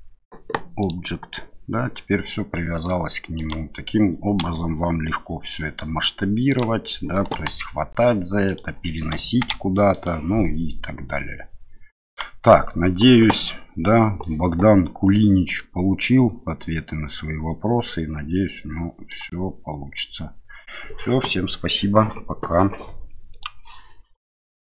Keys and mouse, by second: 2.5 middle click, 3.4 click, 4.4 s, 6.5 click, 7.3 g, 8.4 click, 9.3 KP_1, 10.0-12.1 drag, 15.6-19.1 drag.